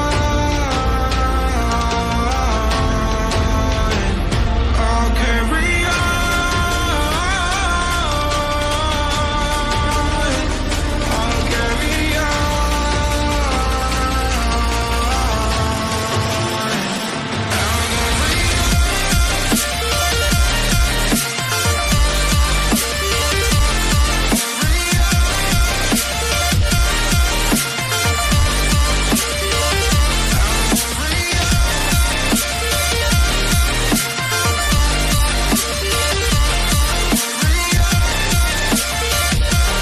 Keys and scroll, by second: 13.8 shift+Down, 15.1 ctrl+g, 17.1 ctrl+g, 18.2 ctrl+g, 26.9 ctrl+g, 27.3 ctrl+space, 27.8 ctrl+alt+z.